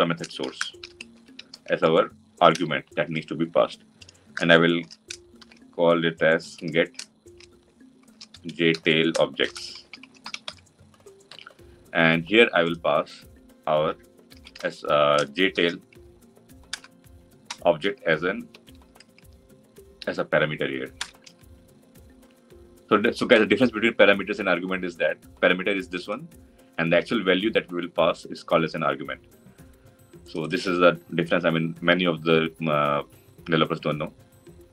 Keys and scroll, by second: 2.4 Return, 16.6 Return, 21.0 Return.